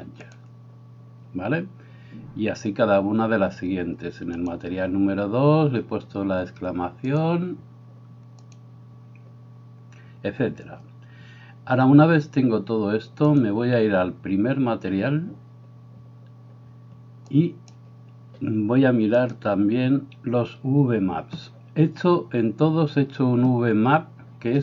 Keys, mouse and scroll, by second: 7.0-8.7 drag, 13.3-17.7 drag, 19.2 click.